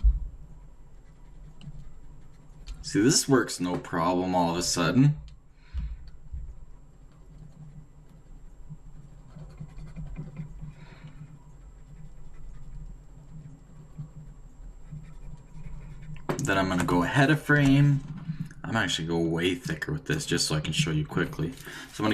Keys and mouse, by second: 16.6 d, 17.6 Right, 19.7-20.7 drag.